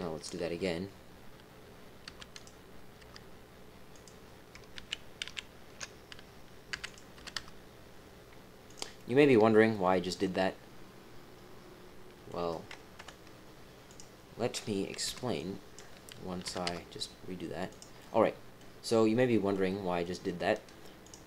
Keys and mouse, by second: 0.4 KP_3, 2.0 g, 3.0 y, 3.9 click, 4.7 ctrl+z, 5.2 ctrl+z, 6.7 e, 7.1 g, 9.6-12.2 drag, 10.2-12.2 middle drag, 12.9 KP_7, 13.8 click, 15.0-16.4 typing, 17.9 click, 19.1 click, 19.6 click, 19.6 middle click, 19.6 right click.